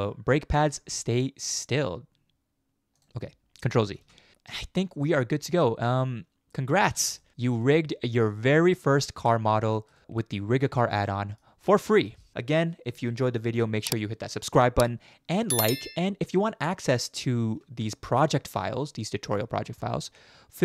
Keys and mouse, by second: 4.0 ctrl+z, 5.6 shift+middle drag, 6.8 ctrl+z, 7.2 shift+middle click, 7.6-9.9 middle drag, 10.8 shift+middle drag, 11.1 middle click, 12.1 middle click.